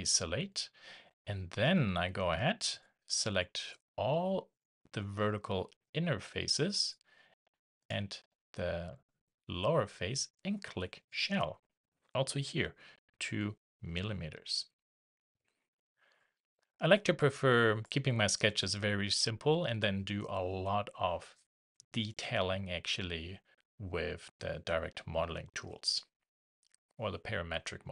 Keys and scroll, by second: 13.8 shift+Return.